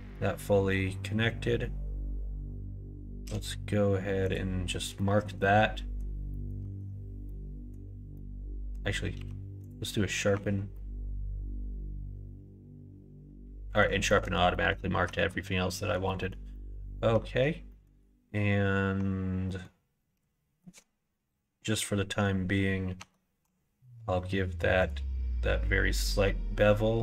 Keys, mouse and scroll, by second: 3.1 q, 4.9 middle click, 5.3 middle click, 6.2 middle click, 6.5 Tab, 7.1 middle click, 8.0 middle click, 9.1 q, 10.2 Tab, 10.6-13.7 middle drag, 14.0 middle click, 14.5 middle click, 15.0 middle click, 15.4 middle click, 16.0 middle click, 16.4 middle click, 17.6 middle click, 19.3 middle click, 19.9 q, 22.9 Tab, 23.3 q.